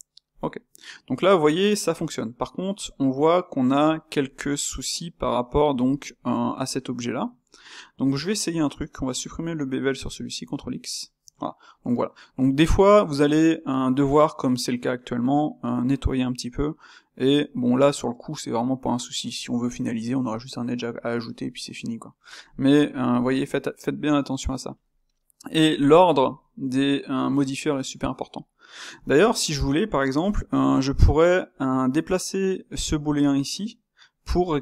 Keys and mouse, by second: 0.8-6.6 middle drag, 6.6 click, 7.2-8.0 ctrl+middle drag, 8.0 Tab, 10.4 ctrl+x, 11.4 Tab, 11.7-25.5 middle drag, 25.5 drag, 25.7-32.8 shift+middle drag, 32.8 click, 34.1 click.